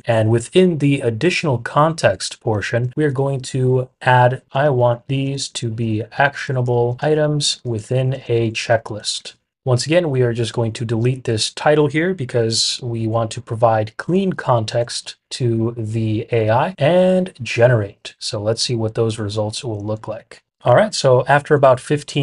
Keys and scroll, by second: 0.0-0.4 typing, 4.2-9.6 typing, 13.7-15.5 typing.